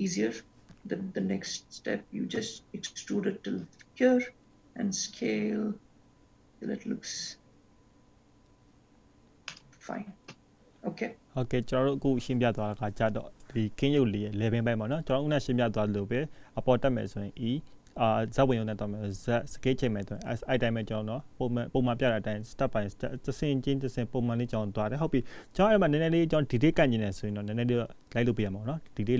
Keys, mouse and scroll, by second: 1.0 e, 4.5 s, 11.0-12.6 scroll down 9, 13.0 ctrl+s, 13.9-15.0 scroll up 3, 15.4 ctrl+s, 15.9-16.7 scroll up 3, 16.7-18.2 scroll down 8, 18.2 scroll up 2, 19.4-20.2 scroll up 1, 22.7-23.3 scroll down 1, 23.3-23.8 scroll down 1, 24.0-24.9 scroll down 2, 24.9-26.5 scroll up 1, 26.5-27.7 scroll up 1.